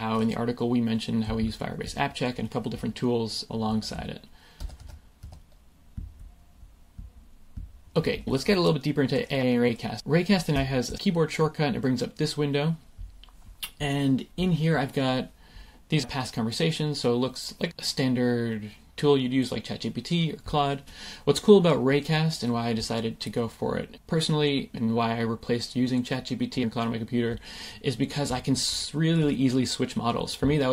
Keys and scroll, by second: 4.5 Escape, 10.8 shift+super+i, 16.3 typing.